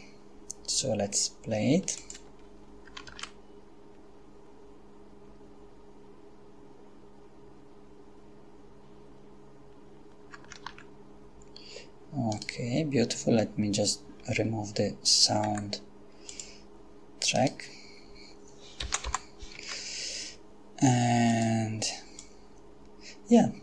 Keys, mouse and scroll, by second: 2.0 click, 3.1 alt+a, 10.6 alt+a, 12.3 right click, 15.5 x, 16.4 click, 17.4 right click, 18.8 g, 19.1 y, 19.6 Escape, 21.3 click, 22.2-23.6 drag.